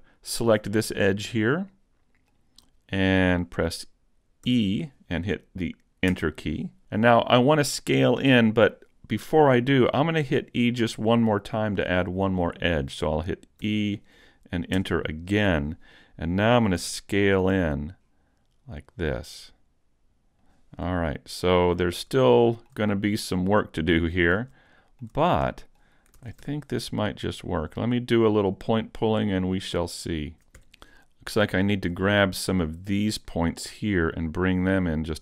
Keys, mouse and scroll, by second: 0.3 alt+right click, 0.8 middle click, 4.5 e, 13.7 e, 16.8 s, 20.5 click, 21.1 middle click, 21.9-22.3 scroll up 2, 22.3 shift+middle click, 23.1 middle click, 24.2 scroll up 1, 24.7 shift+middle click, 25.5 middle click, 26.2 ctrl+Tab, 27.4 right click, 27.8 middle click, 28.7 shift+middle click, 29.7 click, 30.2 middle click, 30.3 ctrl+Tab, 31.0 middle click, 31.7 shift+middle click, 32.1 middle click, 33.3 right click, 33.5 scroll up 1, 33.7 middle click, 34.9 click.